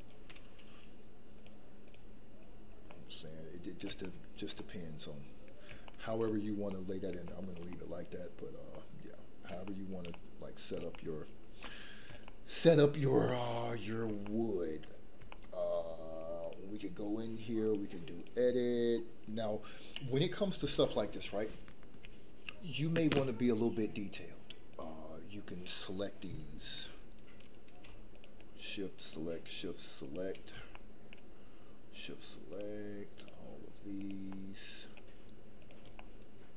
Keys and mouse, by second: 1.5 click, 2.9-3.7 middle drag, 3.9-4.4 shift+middle drag, 4.5-5.5 middle drag, 5.8-6.2 shift+middle drag, 6.7-7.0 middle drag, 7.2 shift+middle drag, 7.7-8.3 middle drag, 8.8-9.4 middle drag, 9.6-10.0 shift+middle drag, 10.1 middle click, 10.9-11.3 shift+middle drag, 11.6-12.1 middle drag, 12.2-12.8 shift+middle drag, 13.2-13.6 shift+middle drag, 14.2-14.6 shift+middle drag, 15.3 shift+middle drag, 16.4 click, 17.8 click, 24.7 click, 30.7 shift+middle click, 32.5 shift+click, 34.0 shift+click, 34.3 shift+middle click, 35.9 middle click.